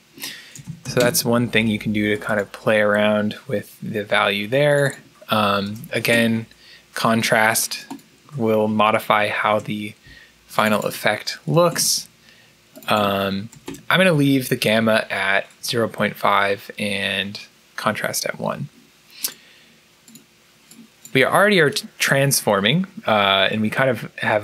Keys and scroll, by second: 0.3-1.2 typing, 5.3-6.3 typing, 9.0 1, 9.3 Return, 11.4 2, 13.4 1, 13.5 Return.